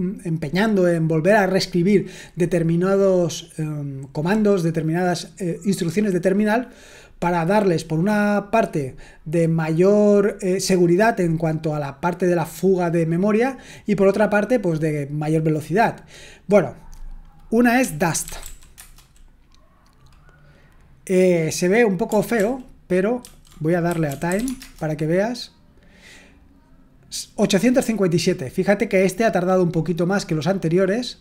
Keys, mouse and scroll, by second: 17.5-18.9 typing, 22.3 ctrl+p, 23.2 ctrl+a, 23.6-24.8 typing, 28.2-31.2 scroll up 2.